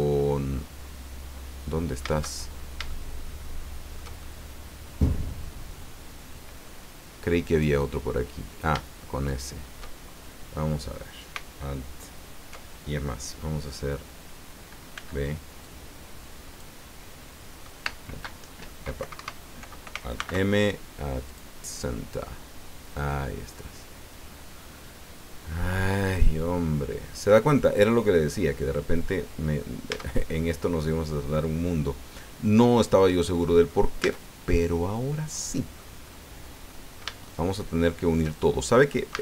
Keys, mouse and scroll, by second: 2.4-2.9 shift+scroll up 1, 3.0-6.8 shift+drag, 7.4 right click, 9.2 shift+right click, 10.6-11.0 scroll down 2, 14.9 b, 15.6-16.8 drag, 17.9 space, 19.0 Escape, 20.2 alt+m, 21.3 click, 22.2-22.9 scroll down 4, 22.9-26.0 drag, 26.0 middle click, 26.7-27.0 scroll down 2, 27.3-29.7 drag, 29.9 Tab, 30.3-30.6 scroll up 1, 30.8-33.9 drag, 34.0 Tab, 34.5-35.9 drag, 36.0-36.4 scroll up 1, 36.6 click, 37.1 shift+middle click, 39.1 a.